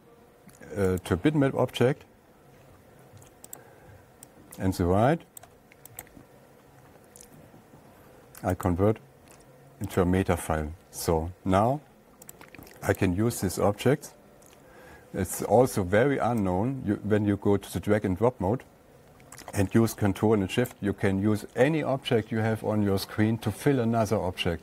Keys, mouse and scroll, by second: 1.5 click, 5.8 click, 6.5 right click, 9.1 click, 10.5 click, 12.8 click, 13.5 click, 19.8 click, 21.1 click.